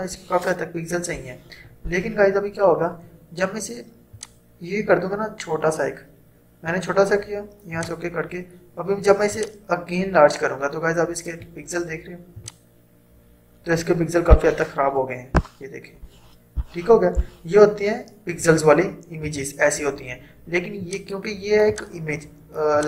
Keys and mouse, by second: 4.2-12.4 drag, 18.9 click, 19.3 ctrl+0, 20.8-22.8 drag.